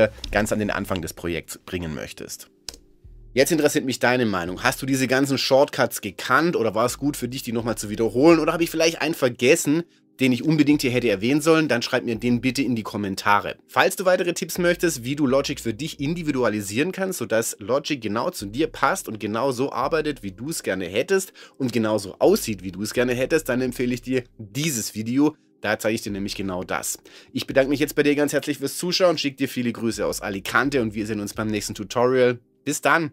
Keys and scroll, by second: 2.7 Return.